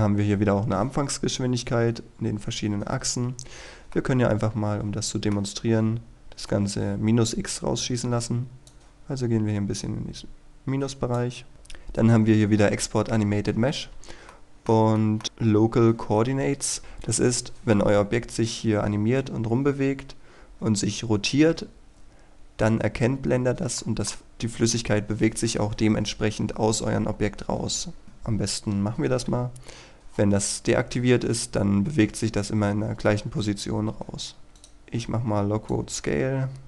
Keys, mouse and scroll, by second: 4.1-5.5 middle drag, 8.8-11.5 drag, 14.4 middle click, 15.1 shift+middle click, 28.0 scroll down 1, 28.2-28.5 scroll up 1, 34.3 scroll down 1, 34.5 scroll up 1, 34.7-36.6 drag.